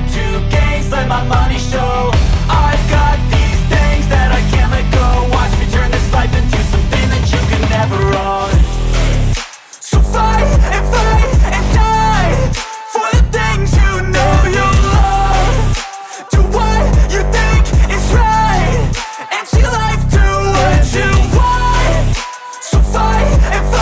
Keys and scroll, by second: 0.5 Return, 1.2-6.9 typing, 2.2 Return, 5.1 ctrl+BackSpace, 7.5 Left, 7.7 Left, 7.8 Left, 8.4 Right, 8.6 Right, 8.9 Right, 9.5-10.8 typing, 10.9 Right, 11.8-18.9 typing, 13.4 Right, 14.5 Return, 19.5 End, 20.3-21.9 typing, 21.9 Return, 22.2 Up, 22.4 Up, 22.5 Up, 23.0 Up, 23.3 Return, 23.7-23.8 typing.